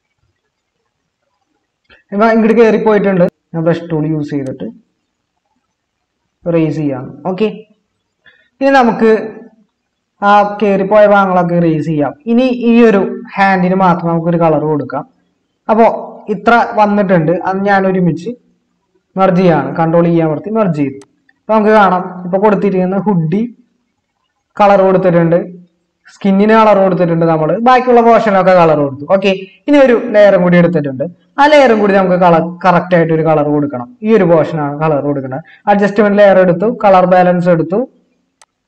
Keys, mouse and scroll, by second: 3.2 typing, 19.6 ctrl+e.